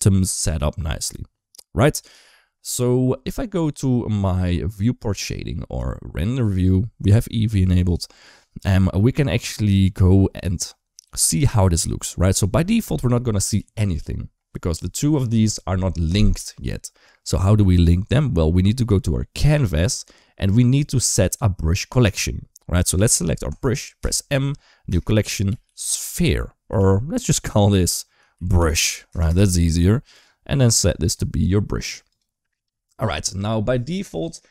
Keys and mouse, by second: 6.2 click, 14.9 click, 23.3 click, 23.8 m, 25.9 e, 29.1 Return, 30.9-32.0 drag.